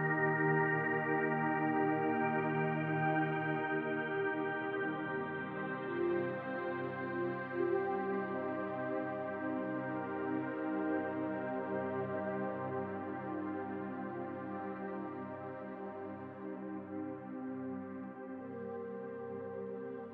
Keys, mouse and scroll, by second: 1.5 scroll up 2, 1.6-3.4 middle drag, 1.9 scroll down 2, 3.4-9.4 drag, 9.3 scroll down 1, 9.4-11.3 middle drag, 10.1-11.0 scroll up 2, 11.3-16.1 drag, 15.8 scroll down 1, 16.1-17.7 middle drag, 16.7-17.7 scroll up 2, 17.7-19.9 drag, 19.9-20.1 shift+middle drag.